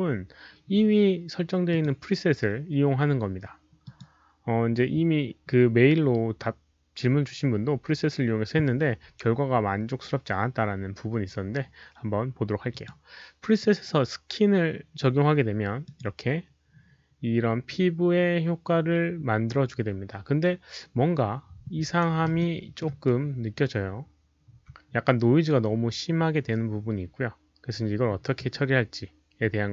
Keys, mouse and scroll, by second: 0.6-0.9 middle drag, 0.6 alt+click, 0.6 alt+right click, 1.6 alt+click, 3.2 click, 3.2 alt+right click, 3.8 click, 5.9 click, 8.9 click, 12.6 click, 15.8 click, 19.2 click, 21.9 click, 22.3 alt+middle click, 23.0 alt+right click.